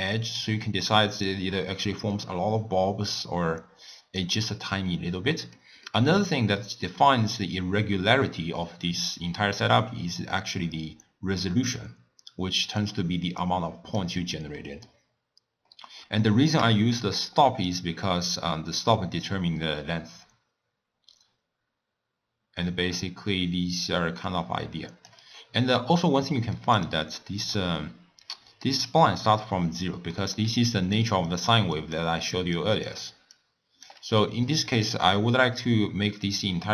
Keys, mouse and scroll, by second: 1.3-4.3 drag, 5.4-9.4 middle drag, 9.4-12.4 drag, 14.6 middle click, 15.1-15.7 scroll down 1, 15.7-17.7 middle drag, 17.7-20.7 drag, 26.3-26.8 middle drag, 26.8 click, 27.2 middle click, 27.7-28.3 scroll up 3, 28.4-30.5 middle drag, 30.5-36.2 typing, 30.8 click, 31.3 click, 31.8 click, 32.6 click, 33.4 click, 34.2-34.8 middle drag, 36.3-36.7 drag.